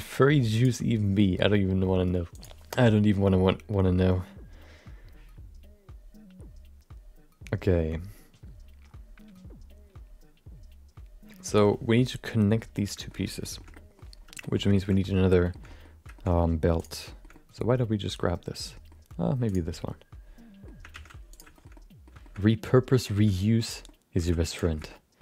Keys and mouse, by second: 0.5 click, 13.0 shift+middle click, 13.1 middle click, 13.5 shift+middle click, 13.7 middle click, 14.4 middle click, 14.7 shift+middle click, 15.0 middle click, 15.5 shift+middle click, 15.6 middle click, 16.1 shift+middle click, 17.1 shift+middle click, 17.3-18.9 middle drag, 19.9 middle click, 20.9 shift+d, 21.7 middle click, 22.2 shift+middle click, 22.4 middle click, 23.1 r, 23.8 middle click, 24.2 g, 24.7 middle click.